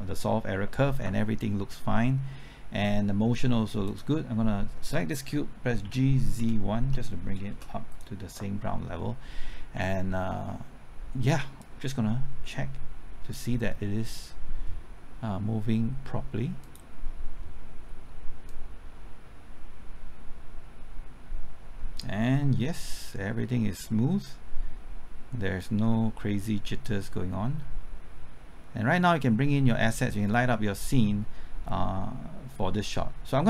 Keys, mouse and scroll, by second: 3.9 click, 5.8-6.8 typing, 7.5 Return, 7.9-30.1 drag, 30.9 click.